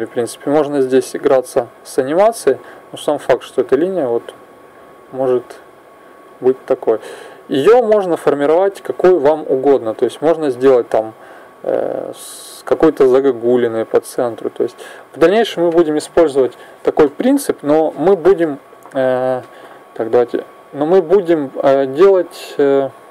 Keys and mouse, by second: 4.4-6.3 drag, 6.8-8.8 drag, 8.6 Escape, 10.5 click, 20.3-23.1 drag.